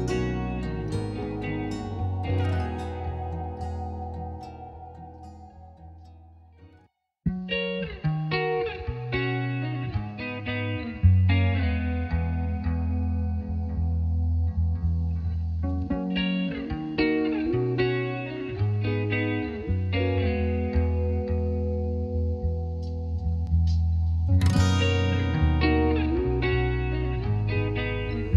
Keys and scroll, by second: 17.5 space.